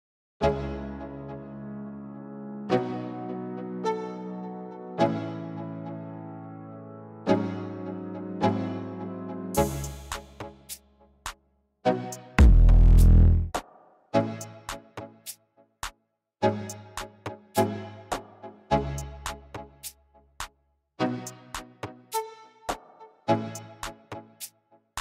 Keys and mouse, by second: 2.7-3.9 drag, 4.3 click, 5.9 click, 7.0 click, 9.0 click, 10.0 click, 10.9 ctrl+z, 10.9-12.2 drag, 11.6 shift+h, 13.3 ctrl+z, 16.8 click, 17.2 click, 17.5 click, 17.9 click, 18.3 click, 18.6 alt+h, 18.9 click, 19.1 Delete, 19.3 ctrl+z, 19.6 h, 20.6 click, 23.1 click.